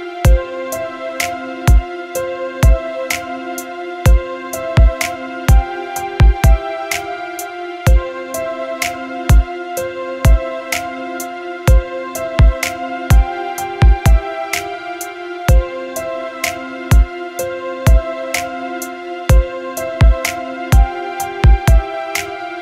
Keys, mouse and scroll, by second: 1.5-3.4 drag, 5.7 click, 17.7 click.